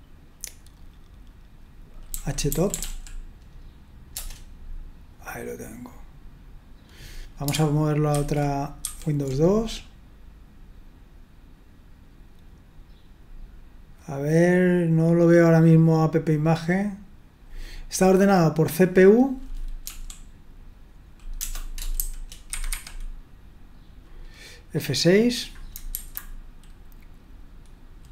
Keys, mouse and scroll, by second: 1.9-3.3 typing, 4.1 Return, 8.2 super+", 8.9 super+2, 19.8 l, 21.4 BackSpace, 21.9 shift+n, 22.5 Escape, 22.7 Escape, 25.7 Delete, 25.9 6.